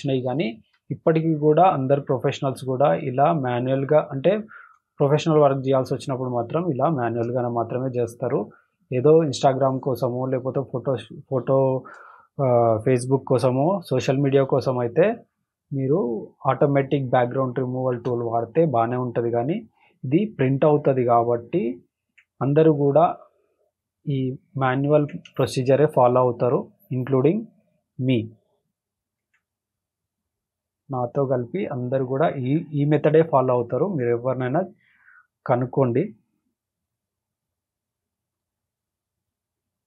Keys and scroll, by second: 0.5 space, 4.0 space, 4.5 space, 6.6 space, 7.1 space, 11.1 space, 11.6 space, 13.8 space, 18.0 alt+space, 18.6 space, 25.2 alt+space, 25.7 space, 33.3 alt+space, 33.8 space.